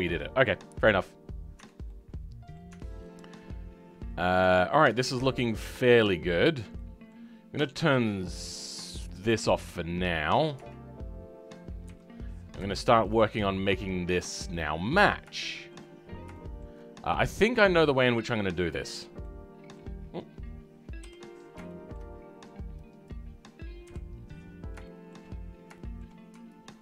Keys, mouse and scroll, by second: 0.9-1.5 scroll down 2, 1.5 Tab, 1.8 middle click, 2.7 Tab, 2.8-3.1 scroll up 2, 3.1-4.9 middle drag, 4.9 scroll up 1, 5.1-5.8 scroll down 5, 5.8 shift+middle click, 6.3-6.7 scroll up 2, 6.7-9.0 middle drag, 9.0-11.8 drag, 11.8 KP_3, 12.7-14.5 shift+middle drag, 14.5 click, 14.7-15.2 scroll up 2, 15.3 shift+middle click, 15.9-16.3 scroll up 3, 16.3-18.0 shift+middle drag, 18.0-19.4 drag, 19.4 middle click, 19.9-21.0 scroll down 2, 21.0 KP_7, 21.6 shift+middle click, 21.9 shift+scroll down 1, 22.1-23.0 scroll up 3, 23.0 click, 23.8 KP_3, 24.8 shift+middle click, 25.3-25.7 scroll up 4, 25.7-26.8 shift+middle drag.